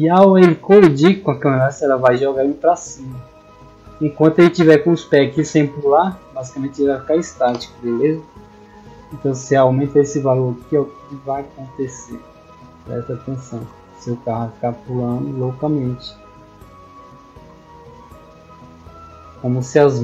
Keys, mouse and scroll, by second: 9.6 click, 10.6 click, 13.2 click, 14.4 click, 16.0 click.